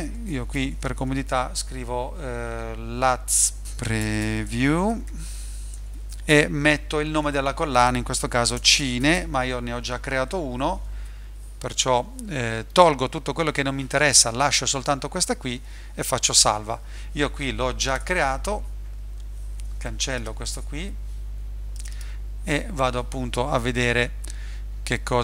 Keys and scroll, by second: 0.0-1.2 typing, 3.3-6.4 typing, 8.3-9.6 typing, 20.5 BackSpace.